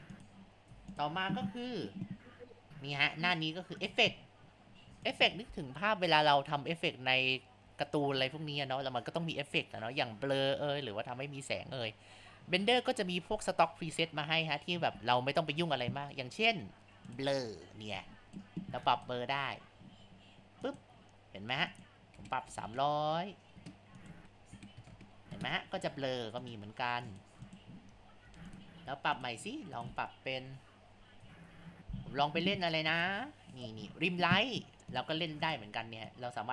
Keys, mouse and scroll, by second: 0.1 click, 0.7 Tab, 3.9 click, 5.0 click, 18.0-20.8 drag, 21.7-22.7 drag, 22.7 KP_0, 24.0 click, 24.9 KP_0, 26.4-27.2 drag, 27.4 click, 28.3 Tab, 29.2 click, 29.7 click, 30.5-32.6 drag, 32.6 Tab, 32.9 click, 33.6-35.5 drag, 36.1-36.5 drag.